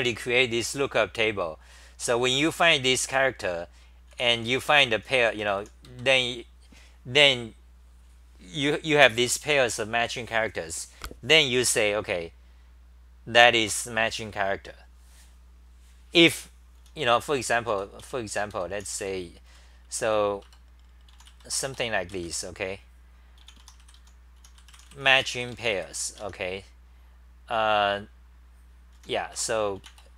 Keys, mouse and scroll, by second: 3.1 2, 4.1-6.1 typing, 16.8-19.0 typing, 20.5 Return, 20.5 c, 21.1 u, 22.1 Home, 23.4 e, 26.2 Home, 26.2 u, 29.0 s, 29.3 Return, 29.8 e.